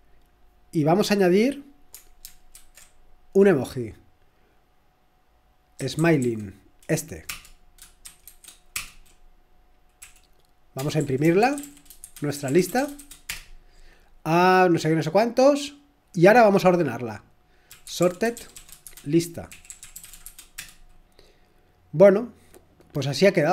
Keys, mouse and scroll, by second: 2.5 ctrl+super+e, 5.8-6.7 typing, 7.3 Return, 7.3 shift+Insert, 7.8-8.7 typing, 10.0-13.5 typing, 17.5-20.7 typing.